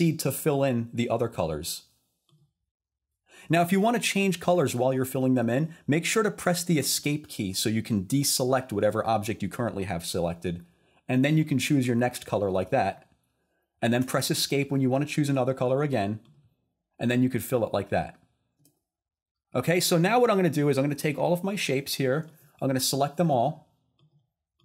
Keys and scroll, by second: 6.9 Escape, 14.0 Escape, 18.6 Escape.